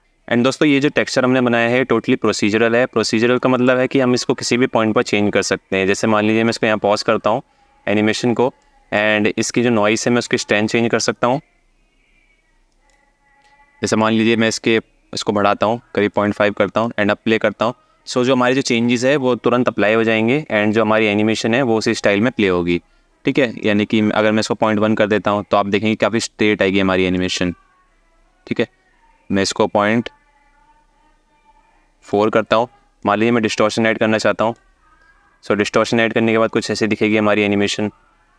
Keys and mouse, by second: 3.2 click, 3.7 space, 8.2 alt+shift+middle click, 9.0-12.5 drag, 13.8-15.8 drag, 16.3 space, 23.3-24.3 ctrl+drag, 26.9-31.8 ctrl+drag, 32.7-34.3 drag.